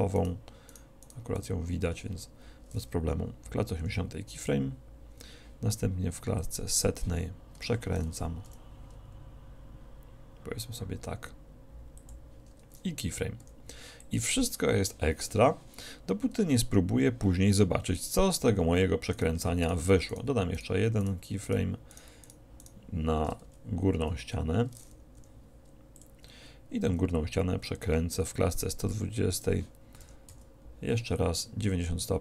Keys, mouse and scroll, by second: 3.9 i, 6.5-8.3 drag, 7.7 r, 12.2-14.1 drag, 13.5 i, 19.2-24.1 right drag, 23.5 z, 24.1 click, 24.1 z, 25.3 i, 29.6-30.8 drag, 30.1 r.